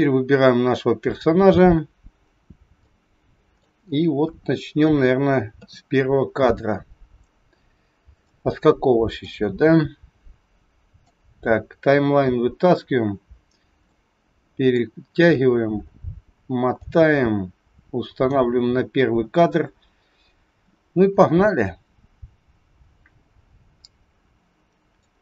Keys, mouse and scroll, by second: 4.2 KP_1, 6.2-6.7 scroll down 9, 7.4-7.8 scroll down 1, 14.4 middle click, 15.0 scroll up 5, 16.8 click, 16.8 scroll up 5, 24.9 middle click, 24.9 scroll up 1.